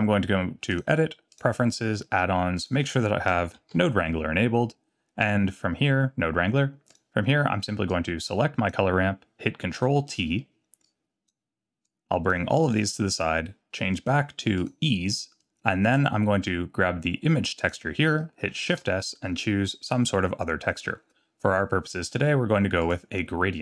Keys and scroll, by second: 9.8 ctrl+t, 18.7 shift+s.